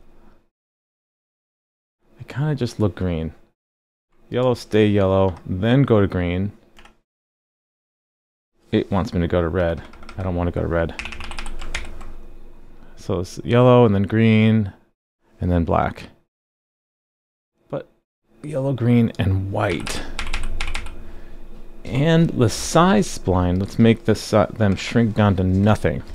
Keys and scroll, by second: 3.2 super+z, 3.6 super+z, 11.7 super+s.